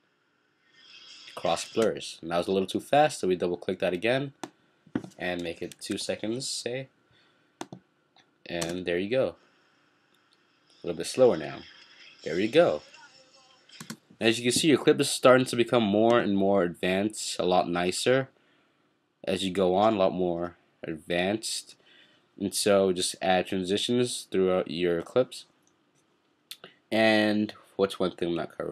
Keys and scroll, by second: 5.8 2, 6.0 Return.